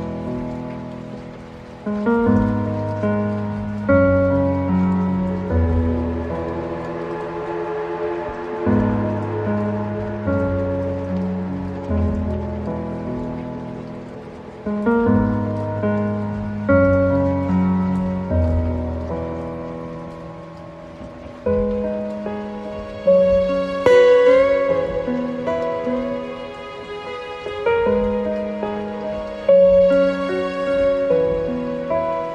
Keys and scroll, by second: 3.6 ctrl+alt+space, 5.0 ctrl+0, 17.0 ctrl+alt+space, 26.8 ctrl+space, 30.0 ctrl+space.